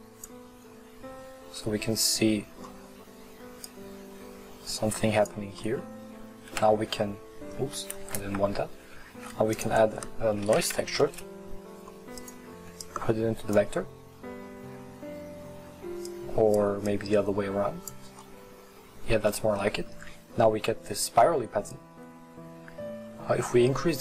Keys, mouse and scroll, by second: 1.4-2.0 scroll up 2, 2.0-2.7 scroll down 1, 2.7-3.5 scroll down 1, 3.5-4.1 scroll down 1, 4.1-5.6 drag, 5.6 middle click, 6.6 ctrl+t, 8.2 ctrl+z, 13.6 click, 16.1 drag, 16.9 click, 22.3-24.0 drag.